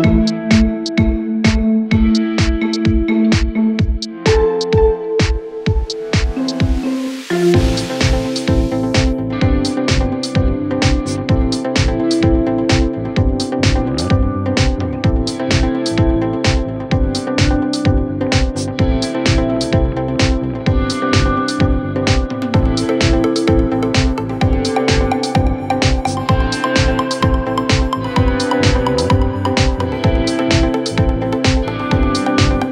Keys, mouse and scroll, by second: 0.6 middle click, 1.4 s, 2.0 drag, 2.1-3.1 middle drag, 3.6 scroll down 1, 3.7-4.2 middle drag, 4.2 scroll up 5, 4.5 click, 4.7-5.0 right drag, 5.0 drag, 5.2-5.7 middle drag, 5.7-6.4 scroll down 5, 6.4 Tab, 6.4-6.9 scroll down 1, 6.9-7.4 scroll down 4, 7.4 ctrl+r, 8.7 scroll down 2, 9.0 ctrl+r, 9.7 scroll up 7, 9.9 click, 10.0 middle click, 10.9 middle click, 11.2 ctrl+r, 11.9 click, 12.1 middle click, 12.5-13.1 scroll down 11, 13.1-13.6 scroll up 6, 13.6 Tab, 13.9 click, 14.1 right click, 16.0-17.2 drag, 17.2 scroll up 6, 17.3 drag, 17.4 middle click, 17.6-18.8 scroll down 6, 19.6 click, 19.8 scroll up 5, 20.0 click, 20.3-20.9 middle drag, 20.9 scroll down 2, 21.1 click, 21.3 Tab, 21.9 scroll down 9, 22.2-23.9 drag, 24.7-25.9 drag, 25.9 ctrl+b, 26.8 Escape, 26.9-27.5 scroll up 10, 27.1 click, 27.5 Escape, 27.7 Tab, 28.6 ctrl+a, 29.6 Tab, 30.1 scroll down 2, 30.2 middle click, 30.7 click, 31.0-31.6 scroll down 1, 31.6-32.7 drag.